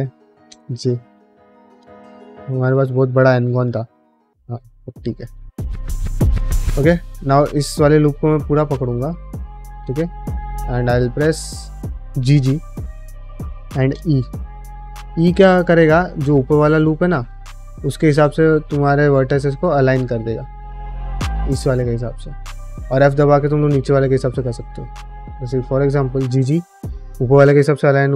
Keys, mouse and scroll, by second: 0.4 j, 1.0 1, 1.1 click, 1.7 g, 2.9 click, 3.3 g, 4.6 middle click, 5.7 middle click, 6.0 middle click, 6.3 shift+middle click, 6.5 middle click, 7.2 alt+click, 7.5 middle click, 7.9 middle click, 9.1 alt+shift+click, 9.8 middle click, 10.2-11.3 middle drag, 12.8 g, 21.7 middle click, 22.7 middle click, 23.6 middle click, 24.1 ctrl+z, 26.0 g.